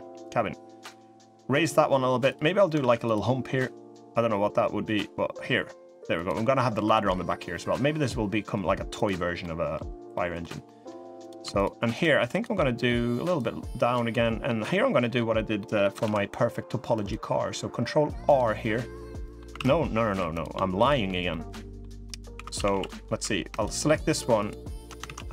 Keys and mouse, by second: 2.5 ctrl+r, 6.5 3, 6.6 click, 6.9 e, 9.1 middle click, 9.8 middle click, 10.4 middle click, 10.9 click, 11.3 shift+click, 11.7 shift+click, 12.1 shift+click, 13.1 click, 13.8 middle click, 14.8 middle click, 15.3 middle click, 15.7 ctrl+r, 18.3 click, 19.3 ctrl+z, 19.8 3, 21.1 click, 21.8 click, 22.1 2, 22.3 a, 22.4 a, 22.6 click, 22.9 3, 24.1 alt+shift+click, 24.8 ctrl+z, 25.1 2.